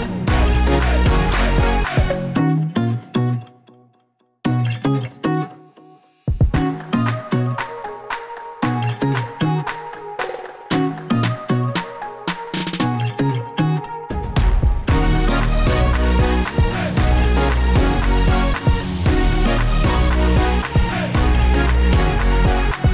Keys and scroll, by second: 0.0-21.4 typing, 6.6 Return, 19.3 Left, 19.4 Left.